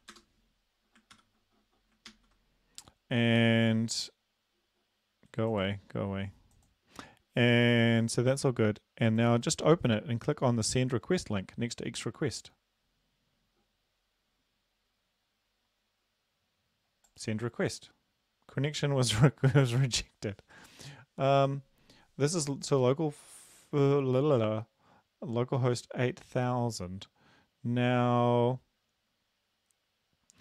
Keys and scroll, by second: 0.2 Return, 1.2 ctrl+v, 2.1 ctrl+s.